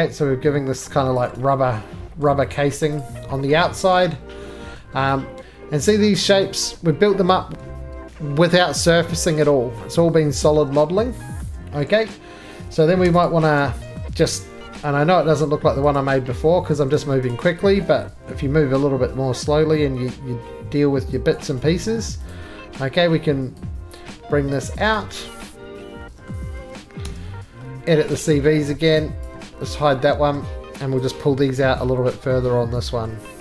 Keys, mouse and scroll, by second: 1.1 click, 1.3 right click, 2.1 scroll, 2.2 middle click, 2.7 middle click, 2.8-4.7 scroll, 2.9 click, 4.7 middle click, 4.7-5.2 scroll, 5.9 middle click, 8.7 scroll up 3, 9.7 middle click, 10.0-11.2 scroll up 12, 11.4 shift+scroll down 1, 11.6-13.0 scroll up 3, 13.0 3, 13.2 click, 14.0 middle click, 14.5-14.8 scroll, 14.5 o, 15.9 click, 16.7 ctrl+z, 17.1 middle click, 17.3 click, 18.4 o, 21.3 click, 21.5 right click, 22.3 click, 24.7 click, 24.9 right click, 25.1 2, 25.9-26.3 scroll down 1, 26.3 middle click, 26.3 ctrl+z, 26.3 click, 26.3 d, 27.0 s, 27.4 scroll down 2, 28.3 middle click, 29.2 click, 29.3 z, 29.8 middle click, 30.0 scroll down 3, 30.1 middle click, 30.3 middle click, 30.4 middle click, 32.0 click, 32.4 scroll up 3, 33.0 scroll up 3.